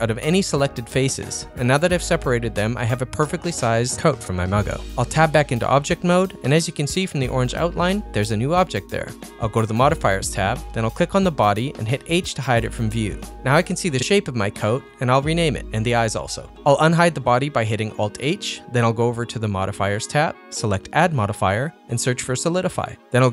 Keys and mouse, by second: 5.0 Tab, 11.6 click, 12.9 h, 13.5-14.8 drag, 14.5 BackSpace, 15.3 click, 15.6 click, 15.9 e, 16.4 click, 17.3-19.2 drag, 19.6 alt+h, 19.7 click, 21.8-23.1 drag.